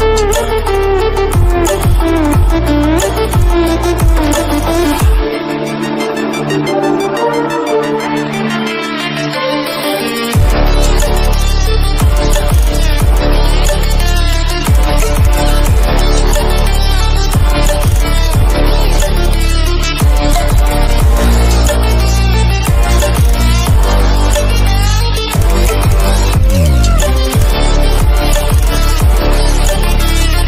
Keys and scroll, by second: 6.2 ctrl+=, 6.8 ctrl+-.